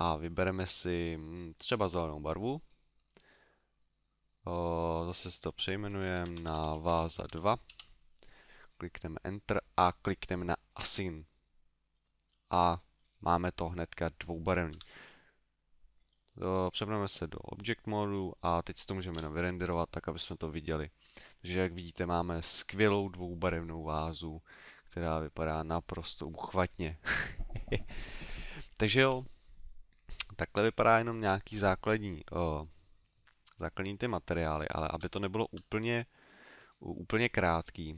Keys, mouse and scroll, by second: 4.9 click, 5.3 click, 10.7 click, 11.9 middle click, 12.9 middle click, 14.7 Tab, 15.1 middle click, 16.1 middle click, 29.0 Escape, 34.1 middle click, 35.2 shift+middle click.